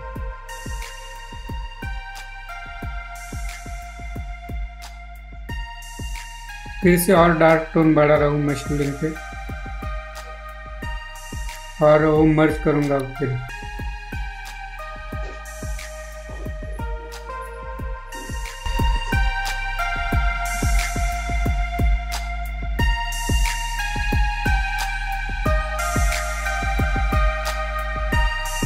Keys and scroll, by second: 10.2 ctrl+z.